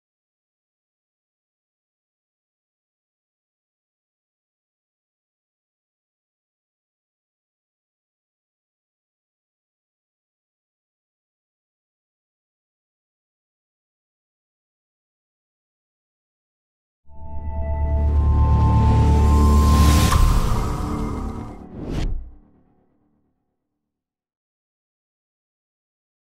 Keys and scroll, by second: 6.9 3.